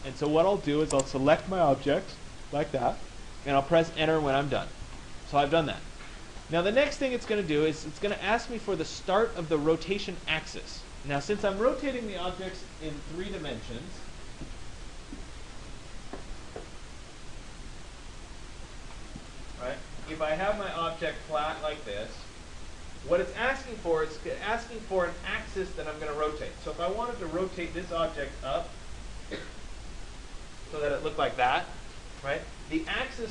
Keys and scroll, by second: 4.4 Return, 6.4 Return.